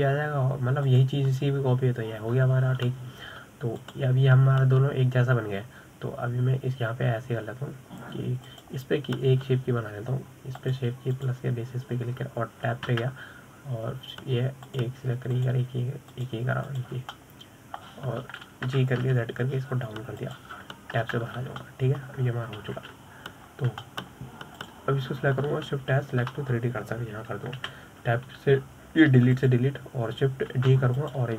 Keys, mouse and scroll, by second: 2.3 click, 5.2 click, 9.9 click, 12.0-14.3 drag, 14.3 Tab, 16.1 click, 16.8 shift+click, 17.6 shift+click, 18.2 shift+click, 18.6-20.1 middle drag, 20.1 g, 22.5 Tab, 22.8 scroll down 1, 23.1-24.0 middle drag, 24.0 KP_7, 24.9-25.3 scroll up 4, 25.3-26.1 shift+middle drag, 26.1 click, 27.1 shift+s, 29.1 Delete, 30.8 click.